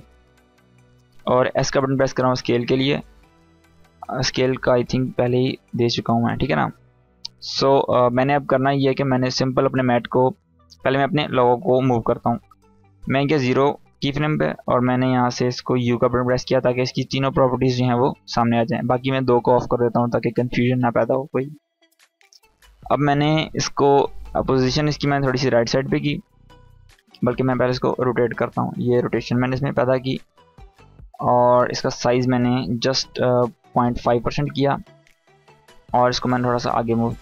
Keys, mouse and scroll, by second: 1.2 s, 4.8-5.7 drag, 10.6-12.9 drag, 15.7 u, 18.7 click, 24.3-26.5 drag, 26.8 ctrl+z, 28.1-30.2 drag, 36.4-37.2 click.